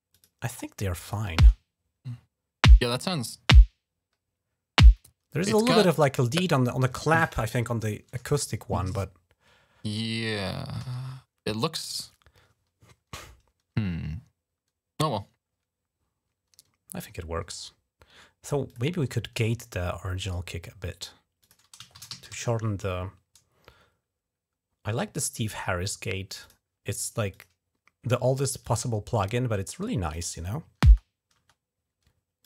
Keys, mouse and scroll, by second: 0.3 click, 0.8 click, 1.2 space, 5.3 space, 5.8 click, 8.6 ctrl+scroll up 2, 10.6 g, 11.1 ctrl+scroll down 2, 11.9 ctrl+scroll down 1, 18.5 click, 20.0 right click, 21.2 click, 21.5-22.6 typing, 26.1 click, 27.1 click, 28.4-30.0 drag, 30.6 space, 31.2 space, 32.2 click.